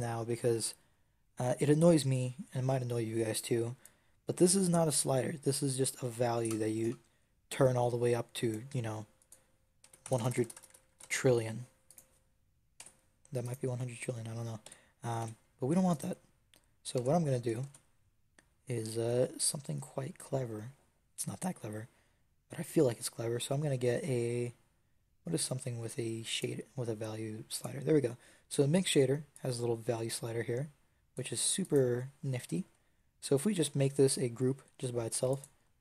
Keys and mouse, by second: 3.7-5.6 drag, 5.6-9.1 middle drag, 9.1 click, 10.0-10.8 typing, 12.7 Tab, 14.5 n, 15.1 n, 16.9 x, 17.5 shift+a, 29.2-31.2 drag, 31.5 click, 33.4 ctrl+g, 35.2-35.8 drag.